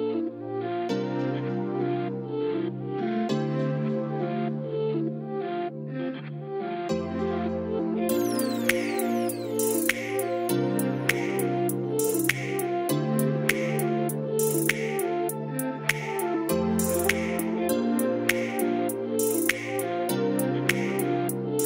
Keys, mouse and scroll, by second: 4.3-9.7 drag, 13.8 click, 14.2 middle click, 16.2-21.6 drag.